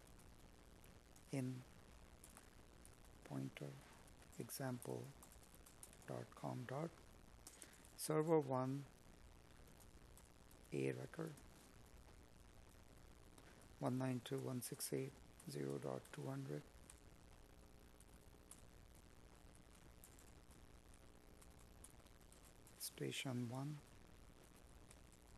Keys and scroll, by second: 0.1 space, 5.8 space, 13.2 Escape, 15.8 Escape, 20.9 Escape.